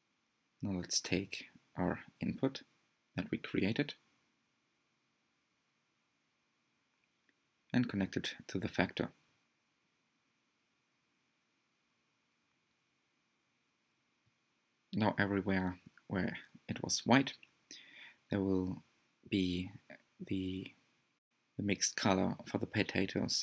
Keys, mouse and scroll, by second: 12.9-23.4 drag.